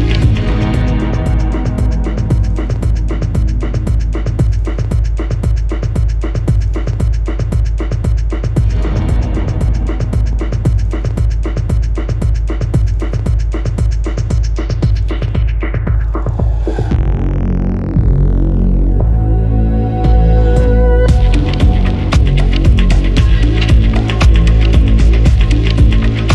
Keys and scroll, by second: 3.4 7, 4.1 Return, 9.5-10.0 typing, 12.5 Escape, 15.0-16.3 typing, 15.9 Return, 22.5-22.8 typing, 23.6 Escape.